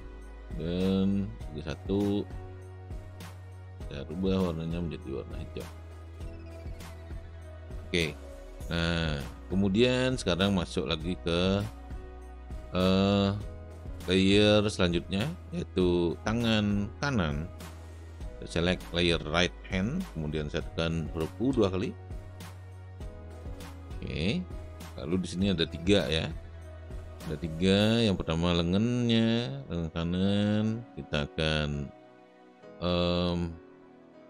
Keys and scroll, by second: 21.7 u.